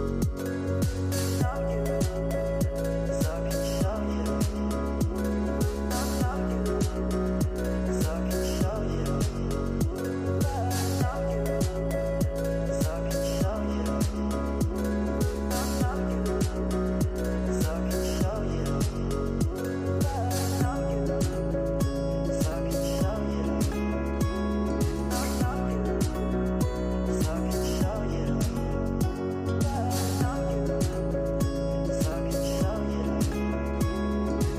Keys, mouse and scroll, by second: 0.3-1.1 scroll down 4, 1.1-2.9 middle drag, 2.9-5.1 drag, 5.1 scroll down 4, 5.7 middle click, 6.5-7.7 scroll up 5, 9.9 shift+a, 11.7 p, 14.7-16.8 drag, 16.8 shift+a, 22.2-23.9 drag, 23.9 scroll down 3, 24.7-25.5 middle drag, 25.5 scroll up 7, 28.9-29.4 middle drag, 29.4 scroll up 1, 29.7 scroll down 2, 30.1-31.3 middle drag, 31.3 scroll up 7, 31.7 middle click, 32.3 scroll up 5, 33.1-34.5 drag.